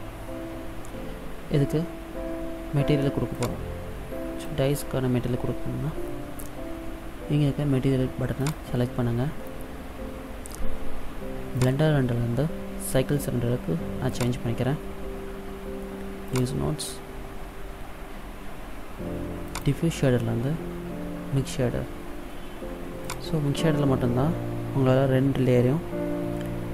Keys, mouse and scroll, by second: 3.5 click, 8.6 click, 11.7 click, 16.5 click, 22.8 click.